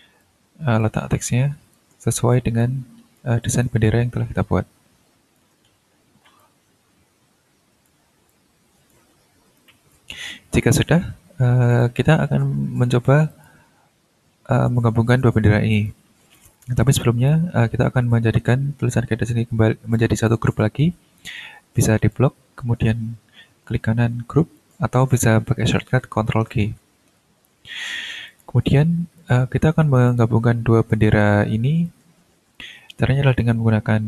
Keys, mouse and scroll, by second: 0.2 ctrl+click, 1.2 ctrl+click, 2.6 ctrl+click, 3.6-5.6 ctrl+drag, 5.6 ctrl+middle click, 6.4-8.0 ctrl+drag, 8.3 ctrl+click, 9.1 ctrl+scroll down 2, 9.6 ctrl+click, 11.7 click, 13.3 shift+click, 15.1 click, 15.7 shift+click, 16.3 shift+click, 16.8 shift+scroll down 3, 17.3-20.1 drag, 20.3-22.3 drag, 23.6 right click, 24.5 click, 27.1 ctrl+g, 28.3 click, 29.2 click, 30.1 ctrl+click, 31.8 ctrl+click, 33.3 click.